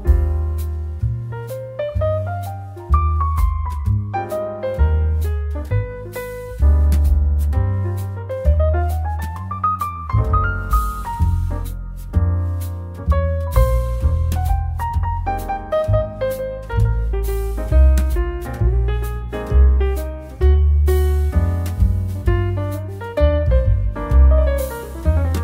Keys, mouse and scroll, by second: 3.2-5.3 drag, 5.8 BackSpace, 7.0-7.5 typing, 8.9 click, 23.8 click.